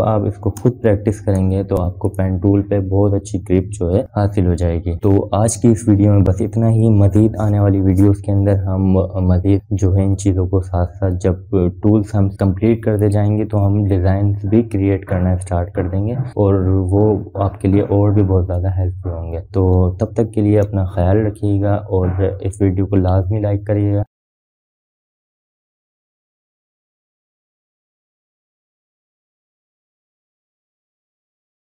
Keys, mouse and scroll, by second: 1.2 click, 2.4 ctrl+0, 3.9 click, 4.7-5.9 scroll up 1, 5.9-6.2 scroll down 1.